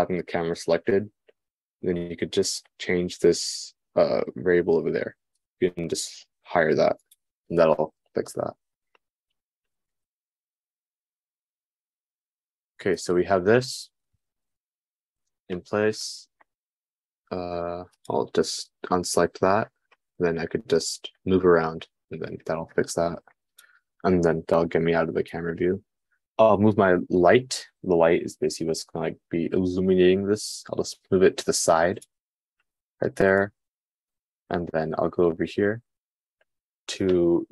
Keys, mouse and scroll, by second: 18.9-24.0 middle drag, 24.2-25.4 middle drag, 31.2-32.2 drag, 33.4-37.5 middle drag, 33.5 g.